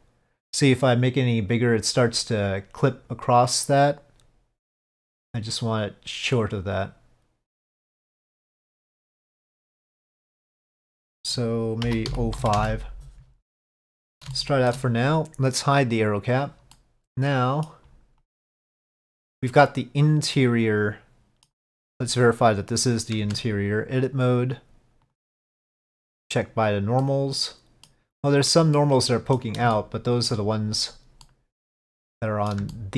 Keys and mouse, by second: 4.9-10.8 drag, 11.1-13.4 drag, 14.4 shift+middle click, 16.3 click, 16.8-17.8 middle drag, 18.3 click, 18.8-19.4 middle drag, 20.4-21.6 middle drag, 22.3-23.2 drag, 23.3 Tab, 25.2-26.8 drag, 27.1 middle click, 28.8 middle click, 29.8 shift+middle click, 31.3 middle click, 32.3 middle click, 32.8 shift+middle click.